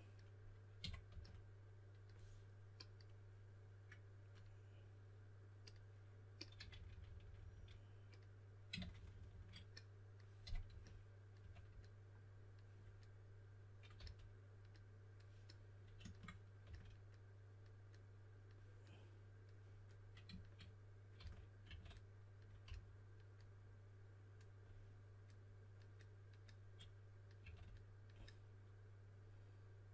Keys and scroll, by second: 0.0-1.6 typing, 6.6-7.4 typing, 8.8-11.4 typing, 14.0 s, 16.6 s, 20.9-22.6 typing, 27.2-27.9 typing.